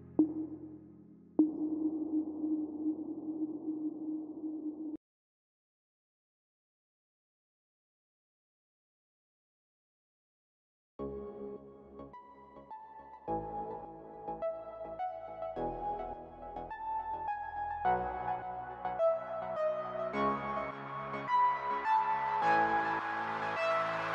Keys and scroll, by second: 18.3 ctrl+j.